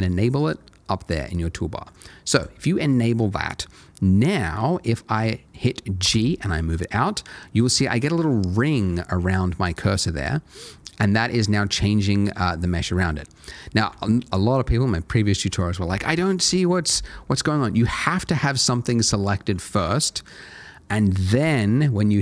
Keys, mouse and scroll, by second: 2.3 click, 3.8 middle click, 6.0 g, 13.8 Escape, 17.9 click, 21.4 g.